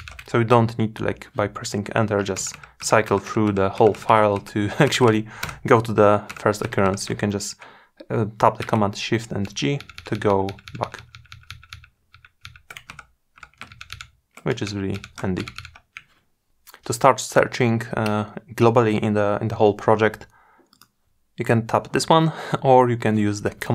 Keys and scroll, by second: 8.4 shift+super+g, 22.9 shift+super+f.